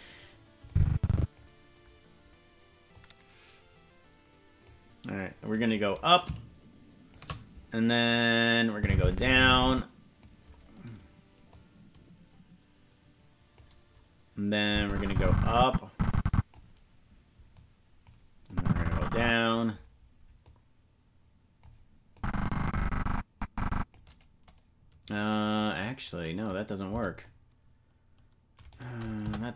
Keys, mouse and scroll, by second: 0.7 click, 2.9-4.7 drag, 6.2-7.2 drag, 8.7-10.2 drag, 11.5-13.6 drag, 14.6-16.5 drag, 17.5 click, 18.5-19.5 drag, 20.4-21.6 drag, 22.1-23.9 drag, 25.7-26.8 right drag, 26.8 c, 29.2 Delete.